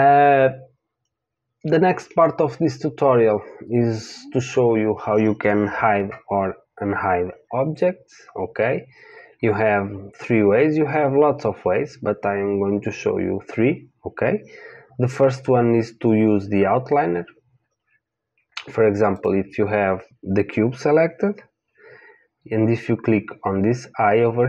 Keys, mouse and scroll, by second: 3.0-9.1 middle drag, 19.1-21.6 drag.